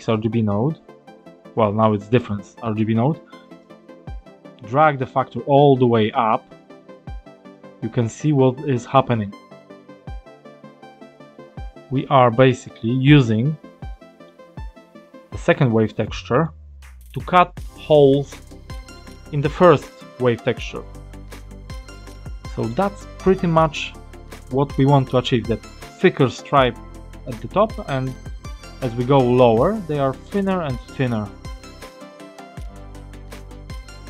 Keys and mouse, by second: 3.5-13.1 drag, 13.8 middle click, 15.9 click, 16.7-21.3 drag, 22.0 click, 32.9 click.